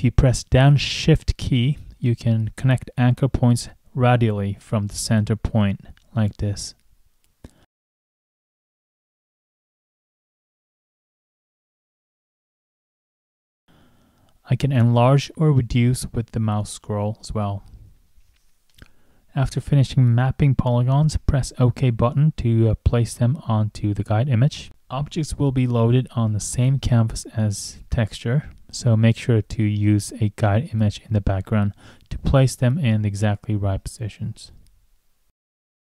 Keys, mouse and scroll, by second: 2.7 shift+click, 3.4 shift+click, 4.1 shift+click, 4.5 shift+click, 5.3 shift+click, 5.8 shift+click, 6.2 shift+click, 6.6 shift+click, 7.1 shift+click, 8.2 shift+click, 8.7 shift+click, 9.2 shift+click, 9.9 shift+click, 10.3 shift+click, 10.8 shift+click, 11.1 shift+click, 11.4 shift+click, 12.4 shift+click, 12.8 shift+click, 13.5 shift+click, 13.8 shift+click, 14.2 shift+click, 15.0 shift+scroll, 16.4 shift+click, 17.3-18.0 shift+scroll, 21.0 shift+click, 22.9 click, 23.9 click, 24.3 click, 25.4 scroll up 1, 28.1 click, 31.5 click.